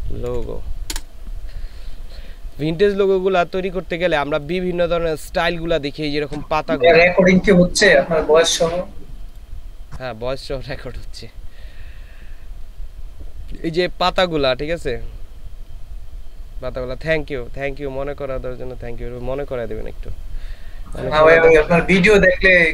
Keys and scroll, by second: 0.3 Down, 0.9 Return.